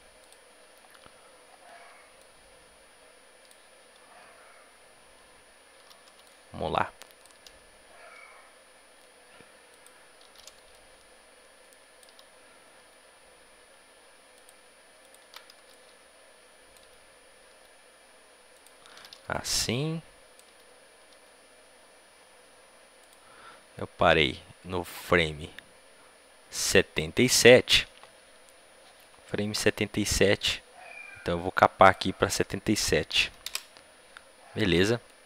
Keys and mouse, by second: 0.1-8.0 drag, 8.0 a, 8.0 b, 12.7 a, 12.7 b, 14.9-17.4 drag, 17.4 a, 17.4 b, 24.2-26.1 drag, 33.3-35.2 drag.